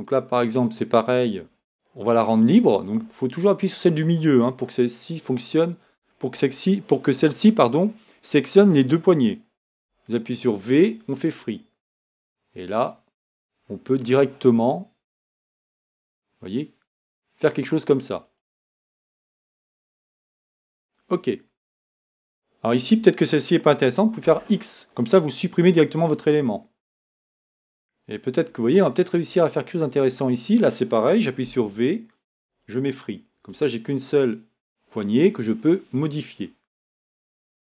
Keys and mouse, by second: 3.9-9.7 drag, 9.7 v, 15.3-17.5 drag, 24.2 x, 31.4 v.